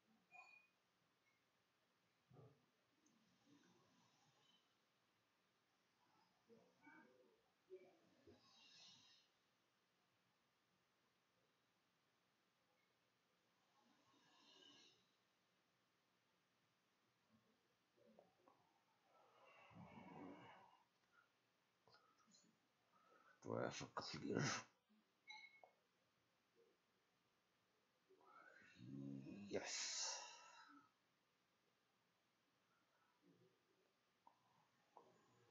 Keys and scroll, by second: 9.2-17.0 typing.